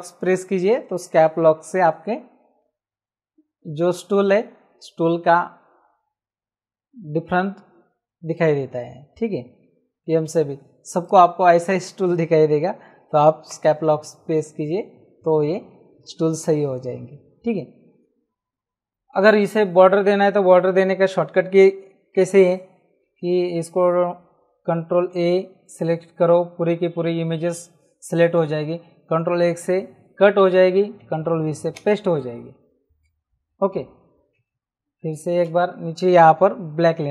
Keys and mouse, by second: 5.2 Caps_Lock, 9.9 m, 11.0 right click, 11.7 click, 13.5 Caps_Lock, 25.1 ctrl+a, 29.4 ctrl+x, 31.7 v, 33.0 ctrl+v, 35.1 ctrl+shift+e, 36.7 x.